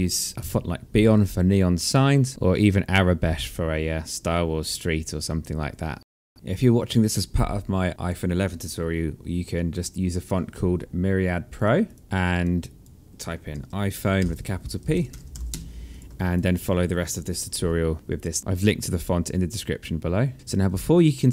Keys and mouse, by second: 20.3 alt+click, 21.2 alt+middle click.